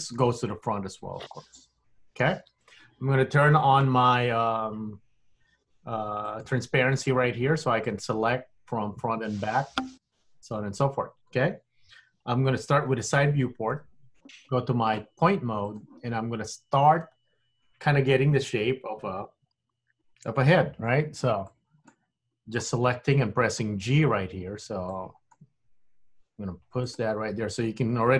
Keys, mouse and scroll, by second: 1.4 middle click, 6.3 click, 13.0 KP_3, 15.7 click, 16.3 scroll up 2, 21.5 click, 23.0 g, 25.0 click, 25.5 g.